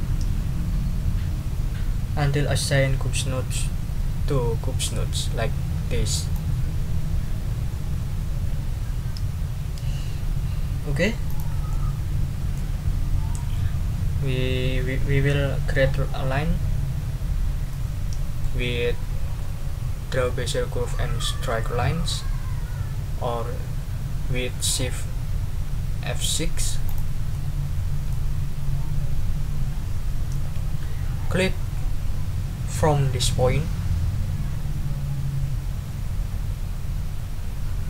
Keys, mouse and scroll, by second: 11.3 click, 11.7 click, 12.2 middle click, 17.7 middle click, 17.9 click, 26.8 click, 27.3 middle click.